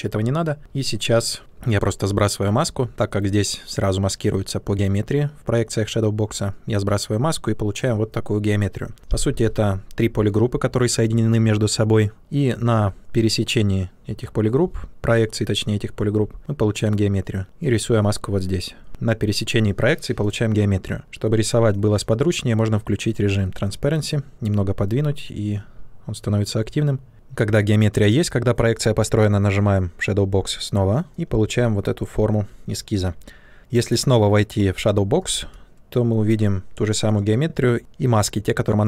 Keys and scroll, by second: 0.5 shift+f, 9.2 shift+f, 12.7 shift+f, 14.1 space, 33.0 ctrl+z.